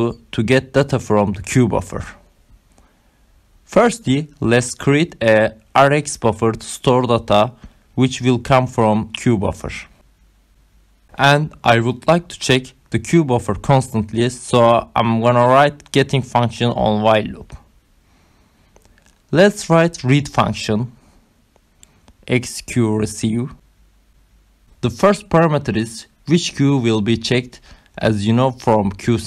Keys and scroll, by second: 0.0-2.6 typing, 3.5 ctrl+alt+8, 3.7 5, 4.2 Right, 4.6 shift+,, 5.2 Return, 5.6 Down, 6.1 Down, 6.4 shift+Left, 6.7 shift+Up, 6.9-8.7 typing, 9.0 ctrl+alt+7, 9.2 Down, 12.2 BackSpace, 13.2 BackSpace, 14.3 Return, 19.0-28.4 typing.